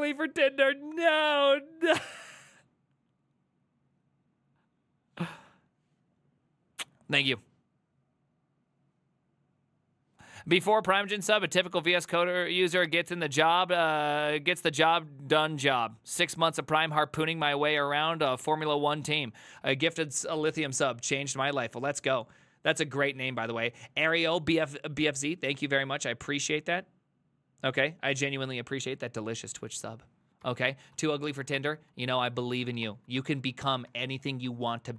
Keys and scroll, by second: 30.5 alt+{, 31.0 ctrl+c, 31.2 ctrl+c, 31.2-34.9 typing, 33.2 ctrl+h, 33.6 ctrl+c.